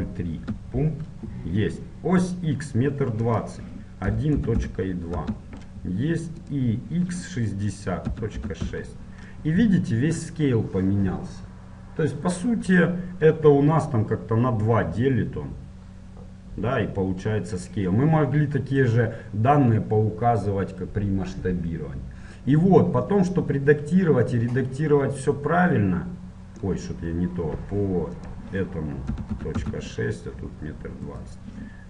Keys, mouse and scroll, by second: 23.3-25.1 middle drag, 29.7-31.8 drag.